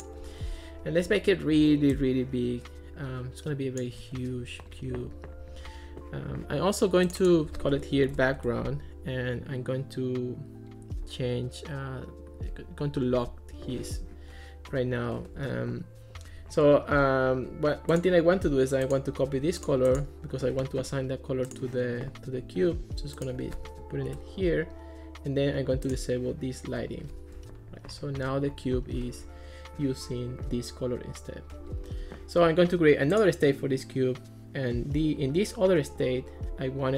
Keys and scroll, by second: 7.8-8.6 typing, 19.3 super+c, 23.7 super+v, 24.1 Return.